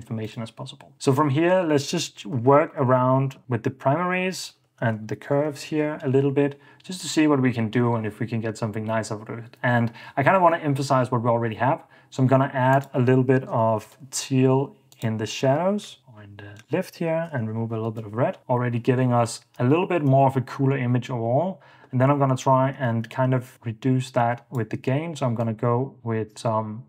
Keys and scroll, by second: 0.9 alt+s, 1.5-6.2 typing, 13.4-14.2 typing, 15.7-18.1 typing, 18.4 super+d, 19.8 super+d, 20.3 super+d, 23.1 super+d.